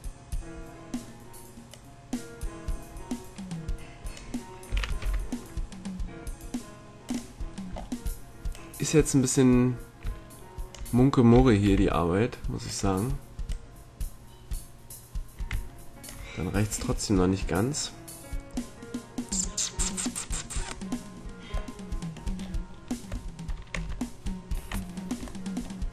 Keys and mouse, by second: 1.6-3.6 drag, 4.6 s, 7.7-10.7 drag, 11.3 s, 13.4-15.2 drag, 15.2 middle click, 16.8-19.5 drag, 21.7-25.4 middle drag, 23.7 Tab.